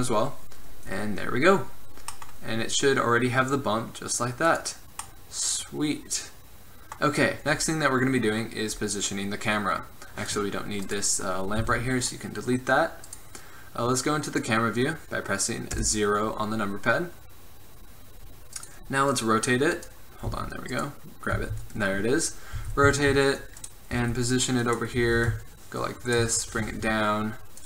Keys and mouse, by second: 0.7 middle drag, 0.9-2.6 drag, 4.9-5.6 middle drag, 5.6 drag, 5.8 middle click, 10.5-15.1 right drag, 11.8 x, 15.9 KP_0, 16.7-17.5 middle drag, 20.4 z, 21.5 z, 22.8 r, 23.8 click, 24.1 g, 24.8 drag, 25.2 r, 26.7 g.